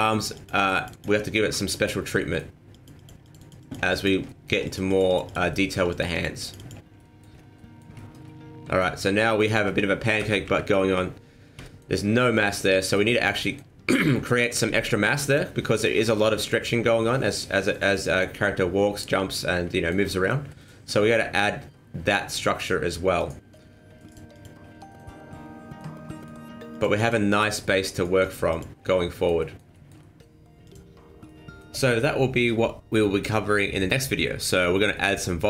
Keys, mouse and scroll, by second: 0.3 click, 0.5 click, 0.7 click, 0.9 click, 1.1 middle click, 1.7 shift+middle click, 2.1 scroll up 2, 2.2 middle click, 2.7 click, 2.9 click, 3.2 click, 3.3 click, 3.6 click, 3.9 click, 4.3 shift+middle click, 4.5 scroll down 1, 4.6 click, 4.9 click, 5.1 click, 5.3 click, 5.5 shift+middle click, 5.9 click, 6.1 click, 6.4 click, 6.5 click, 6.9 middle click, 7.3 scroll down 3, 7.5 middle click, 7.9 shift+middle click, 8.2 middle click, 9.0 middle click, 9.1 shift+middle click, 10.2 KP_1, 10.4 KP_3, 11.6 shift+middle click, 11.8 shift+middle click, 12.5 middle click, 13.1 shift+middle click, 13.4 middle click, 15.1 middle click, 15.2 shift+middle click, 15.5 middle click, 15.6 shift+middle click, 16.8 middle click, 19.7 shift+middle click, 19.8 shift+middle click, 20.0 middle click, 20.5 middle click, 20.6 shift+middle click, 20.8 middle click, 22.2 shift+middle click, 22.2 scroll down 1, 22.3 middle click, 23.7 scroll up 2, 24.1 click, 24.3 click, 24.7 scroll down 3, 24.9 middle click, 25.9 scroll up 2, 26.1 middle click, 26.7 click, 26.9 click, 27.3 click, 27.6 middle click, 28.2 click, 28.5 click, 28.9 middle click, 29.4 middle click, 29.7 shift+middle click, 30.0 shift+middle click.